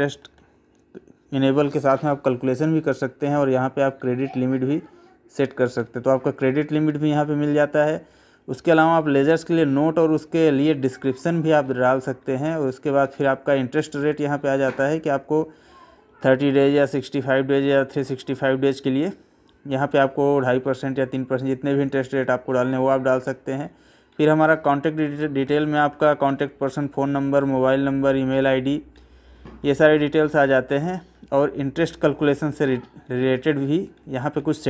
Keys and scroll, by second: 4.0 Right, 5.8 Up, 7.8 Right, 10.0 Right, 10.7 Left, 11.2 Right, 16.7 Left, 17.9 Right, 22.7 Right, 25.4 Left, 26.3 Right, 28.3 Left, 29.8 Right, 31.8 Left, 33.1 Right.